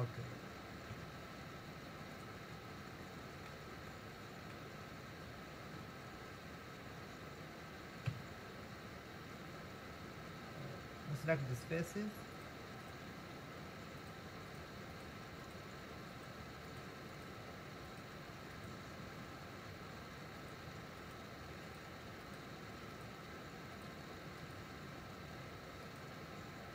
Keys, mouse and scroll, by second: 0.9 Tab, 3.1-4.8 middle drag, 4.8-8.1 scroll up 2, 8.1 KP_1, 11.8 shift+click, 12.3 shift+click, 14.0 shift+click, 14.5 shift+click, 15.5 shift+click, 16.1 shift+click, 16.7 shift+click, 17.1 shift+click, 17.9 shift+click, 18.5 shift+click, 20.4 shift+click, 21.0 shift+click, 21.7 shift+click, 23.8 shift+click, 25.9 shift+click.